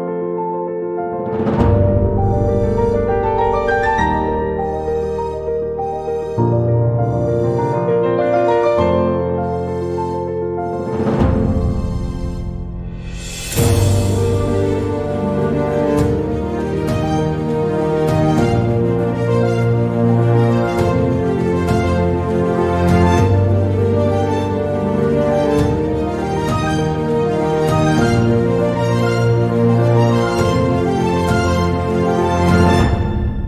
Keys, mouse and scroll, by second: 2.5 e, 4.7 click, 7.0 e, 10.1 r, 11.9 e, 14.7 s, 18.7 click, 21.9 click, 22.9 shift+click, 24.8 shift+click, 27.7 s, 30.7-31.7 drag, 32.1 e.